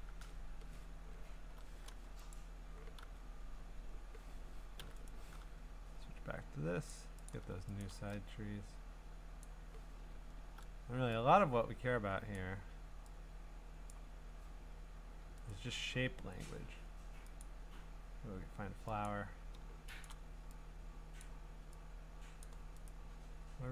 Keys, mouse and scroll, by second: 0.1 ctrl+Tab, 1.1-1.6 scroll, 2.3 click, 2.5 middle click, 3.0 g, 4.8 u, 5.1 right click, 5.8 middle click, 5.9-6.3 scroll, 6.9 click, 7.3 click, 7.8 click, 9.4 click, 10.2-12.3 scroll, 12.3 click, 13.9 click, 15.5 right click, 17.4 click, 19.0 click, 20.0 click, 21.2 click, 23.4 right click, 23.4-23.7 scroll.